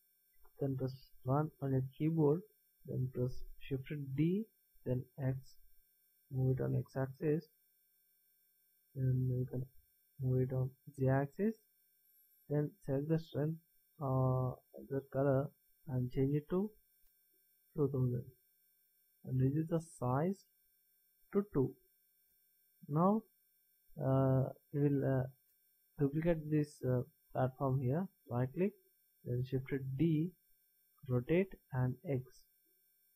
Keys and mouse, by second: 1.3 KP_1, 4.2 shift+d, 9.4-11.3 drag, 14.8 click, 18.6 KP_0, 20.5 click, 23.5-24.6 middle drag, 25.4 middle click, 29.7 shift+d.